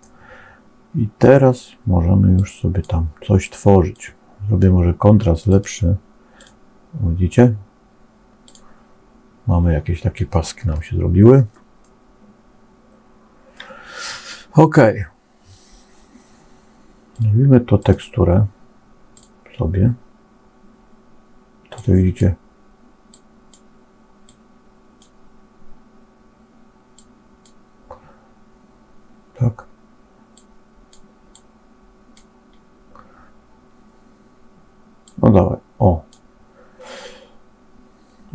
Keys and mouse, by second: 2.4 click, 3.3 click, 5.4 click, 6.2 click, 10.6 shift+middle click, 11.9-13.6 middle drag, 17.0 click, 17.7-19.2 drag, 23.3 click, 24.2 click, 26.9 click, 31.5 click, 34.9-36.1 drag.